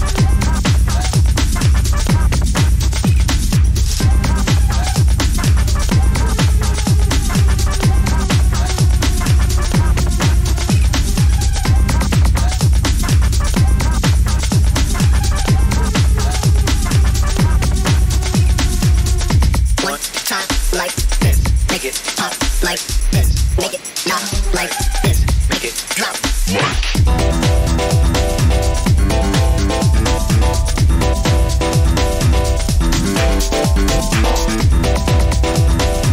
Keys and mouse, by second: 0.0-0.6 middle drag, 3.2-4.2 middle drag, 7.3 k, 20.5 shift+middle click, 21.0-36.1 shift+middle drag.